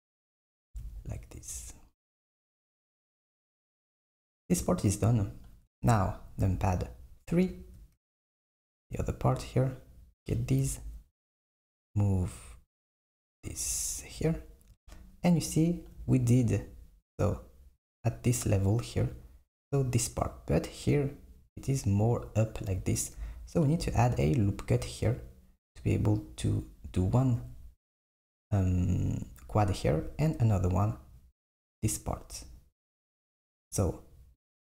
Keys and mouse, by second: 0.6 s, 6.5 KP_3, 9.6 click, 10.7 g, 34.5 click.